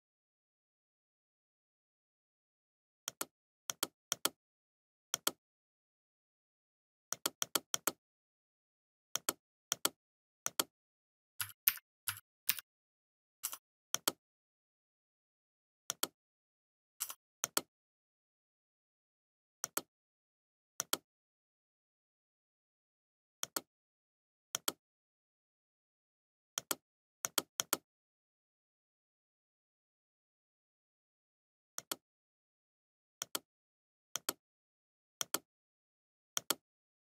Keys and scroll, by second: 0.0 ctrl+f, 3.5 ctrl+c, 15.0 Delete.